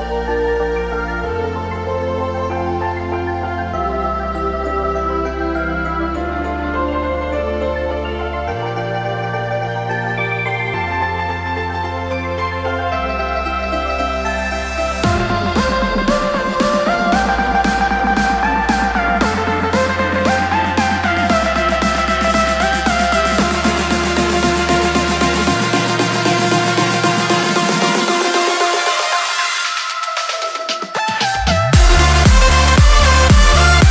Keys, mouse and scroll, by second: 4.4 m, 10.0 click, 14.9 click, 16.0 ctrl+shift+n, 17.0 Return, 17.8 click, 19.0-23.1 typing, 24.1-29.1 typing, 30.6 s, 31.0 Return.